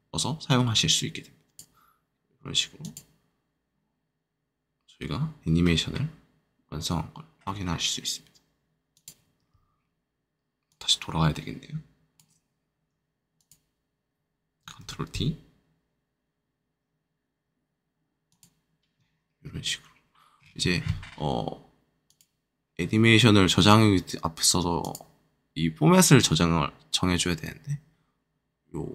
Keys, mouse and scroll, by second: 8.9-12.9 drag, 13.0-15.7 drag, 15.9-17.3 shift+drag, 18.2-25.7 shift+drag, 25.8 click, 25.9-28.6 drag.